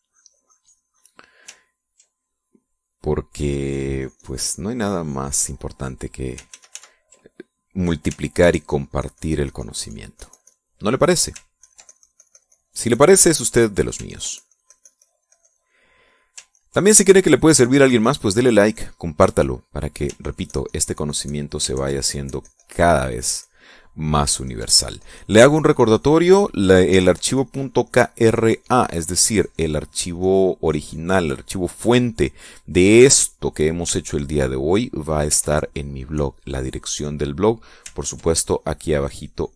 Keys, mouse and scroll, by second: 2.7 ctrl+middle click, 4.1-6.6 drag, 7.2 ctrl+z, 8.9-10.8 ctrl+drag, 10.9 ctrl+click, 11.5 ctrl+middle click, 12.3-14.2 ctrl+drag, 14.2 ctrl+middle click, 14.8-16.4 ctrl+drag, 16.4 ctrl+middle click, 17.2 ctrl+click, 17.5-19.7 ctrl+drag, 19.7 ctrl+middle click, 20.9-22.4 ctrl+drag, 22.4 ctrl+click, 22.8-24.8 ctrl+drag, 25.1-27.6 ctrl+drag, 27.7 ctrl+click, 28.1-32.0 ctrl+drag, 32.1 middle click, 33.7 click, 34.7-35.9 ctrl+drag, 36.0-38.0 ctrl+drag, 38.7 ctrl+click, 39.2-39.5 ctrl+drag.